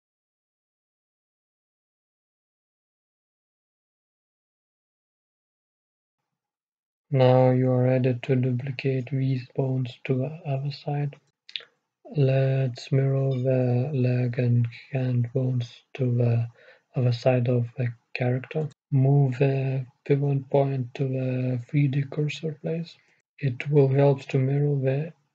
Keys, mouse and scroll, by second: 0.2-2.1 middle drag, 2.6-5.4 right drag, 3.4-5.4 drag, 7.3-9.9 right drag, 8.0-9.9 drag, 11.4-12.5 middle drag, 12.5-13.8 scroll up 1, 13.8-14.1 scroll up 1, 14.1-19.8 right drag, 19.1-20.5 middle drag, 20.5-22.5 drag, 24.9-25.3 middle drag.